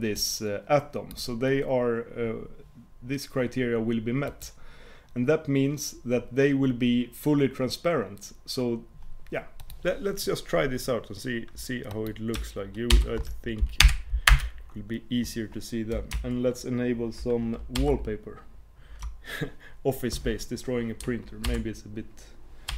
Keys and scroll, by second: 17.8 super+w.